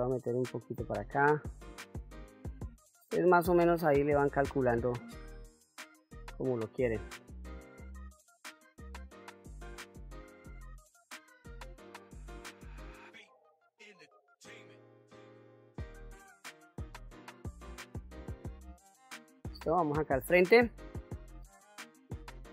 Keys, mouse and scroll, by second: 1.8-4.8 drag, 4.9-6.9 middle drag, 8.1-9.2 drag, 9.2-10.8 middle drag, 11.2 click, 12.1 click, 12.9 middle click, 13.6 click, 14.3 middle click, 14.8 middle click, 16.1-16.6 scroll down 2, 16.9 ctrl+Tab, 19.6 KP_1, 20.1 scroll up 2, 21.5 shift+middle click.